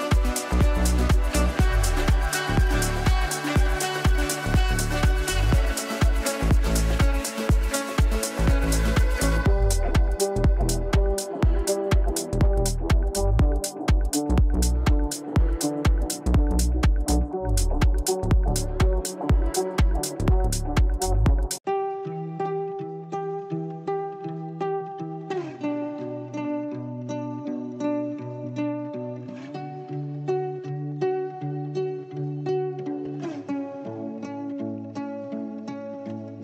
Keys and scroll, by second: 32.9 space.